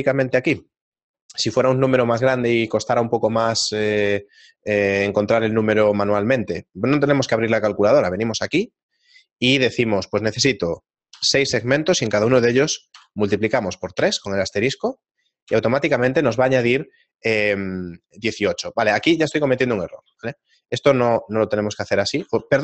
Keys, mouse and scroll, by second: 0.5 F6, 20.0 ctrl+z, 22.1 shift+a.